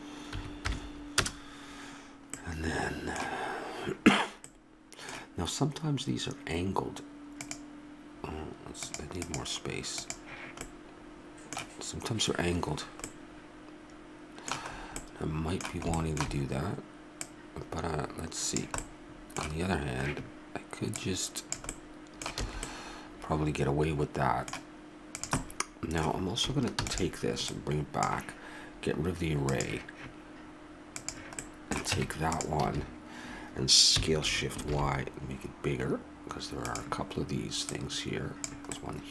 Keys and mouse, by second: 7.4-10.7 drag, 10.7 middle click, 11.3 click, 17.2 click, 18.8 middle click, 21.7 middle click, 22.4 click, 22.4 a, 25.4-26.8 drag, 26.8 shift+d, 31.4 click, 32.0 Tab, 32.7 a, 33.9 s, 37.7-38.8 drag, 38.8-39.1 middle drag.